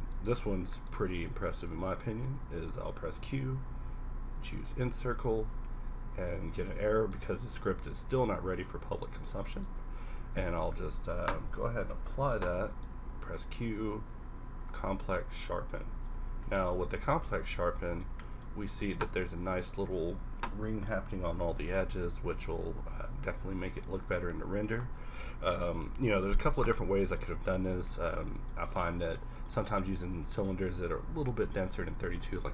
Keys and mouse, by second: 2.1 w, 2.7 q, 7.6 Tab, 10.3 q, 13.0 q, 17.6-17.9 middle drag, 24.7-25.9 middle drag, 26.0 middle click, 29.5 Tab, 30.2 a.